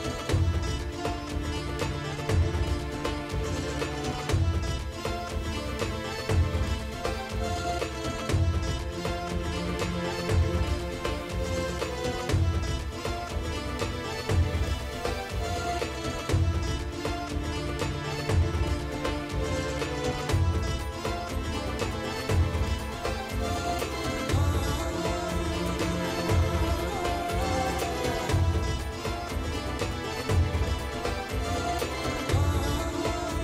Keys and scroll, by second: 1.2 space, 3.2 space, 5.4 space, 6.1 space, 8.4 space, 11.6 space, 13.3 space, 20.9-22.8 typing, 23.2 ctrl+s, 23.8 space, 24.6 space, 24.8 o, 26.2 o, 26.6 [, 27.5 ], 28.6 [, 31.5 ctrl+alt+z.